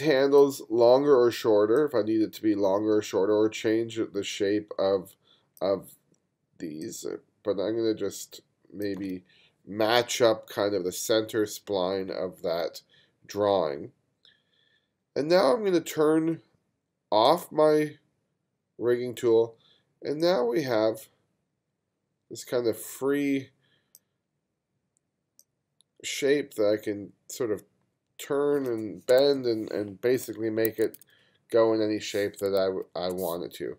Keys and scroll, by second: 29.3 super+z, 30.7 1, 32.6 super+z.